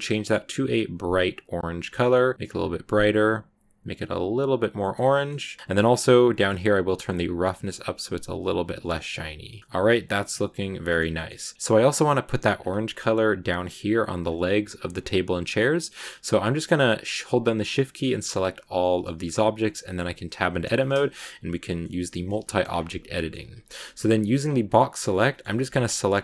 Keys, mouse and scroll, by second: 4.8 middle click, 5.6 scroll up 3, 5.8-7.0 scroll down 4, 7.0-8.6 drag, 8.6 scroll down 3, 8.8-11.2 middle drag, 11.2 scroll up 1, 11.2 middle click, 11.5-12.4 scroll down 4, 12.4 scroll up 2, 14.0-15.8 scroll down 2, 15.8 right click, 16.9 shift+right click, 17.7 shift+right click, 18.7 middle click, 19.5 Tab, 20.6 scroll up 1, 20.6-22.5 shift+middle drag, 22.5-22.9 scroll up 2, 22.9 scroll down 1, 23.0 middle click, 23.5 b, 24.9 scroll up 1, 25.0 middle click, 25.4 b, 25.9 middle click.